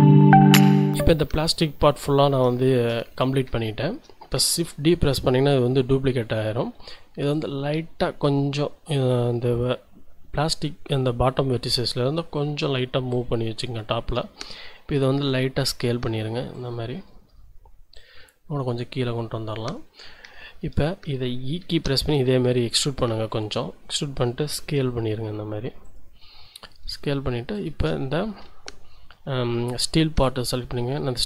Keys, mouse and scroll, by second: 3.6 shift+click, 4.9 shift+d, 6.1 Escape, 7.3-11.4 drag, 13.3 click, 14.9 s, 16.5 click, 16.9-17.5 scroll up 4, 18.0-19.9 drag, 19.9 scroll down 2, 20.3 shift+click, 21.6 e, 22.0 z, 23.9 click, 24.6 s, 25.8 click, 26.2-26.8 scroll up 3, 26.8 a, 27.5 alt+shift+click, 28.0 alt+shift+click, 30.6 g.